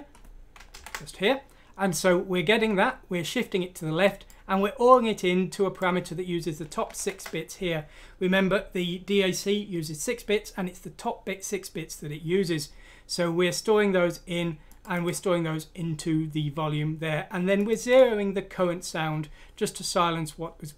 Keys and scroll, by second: 0.7 Left, 6.9 Right.